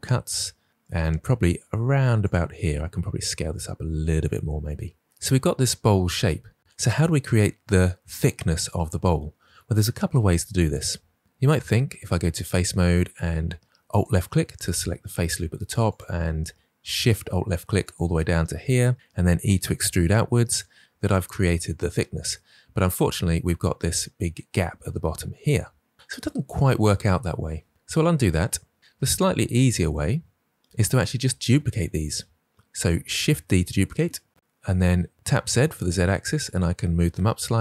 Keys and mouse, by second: 2.8 s, 4.1 click, 11.2 ctrl+z, 12.3 click, 15.9 alt+shift+click, 16.9 alt+shift+click, 19.2 e, 20.4 click, 27.7 ctrl+z, 33.8 shift+d, 35.1 z.